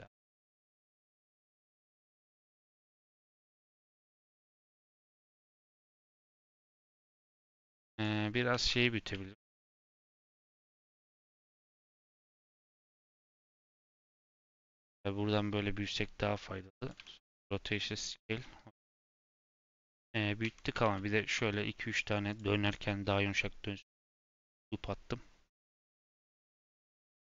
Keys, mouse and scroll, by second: 0.5 Tab, 1.1 middle click, 1.6 Tab, 2.0 click, 2.3 scroll down 2, 2.4 middle click, 2.6 scroll up 2, 3.3 middle click, 4.0 click, 4.4-5.5 drag, 5.8-7.9 middle drag, 7.9 click, 8.5 Tab, 9.1 a, 10.5 Tab, 11.0 click, 11.7 Tab, 12.2 a, 13.0 Tab, 13.4 s, 14.1 Tab, 14.6 s, 16.9 Tab, 17.2 ctrl+a, 18.3 scroll down 1, 18.4-19.9 middle drag, 19.9 /, 20.4 Tab, 20.8 ctrl+r, 24.2 Tab.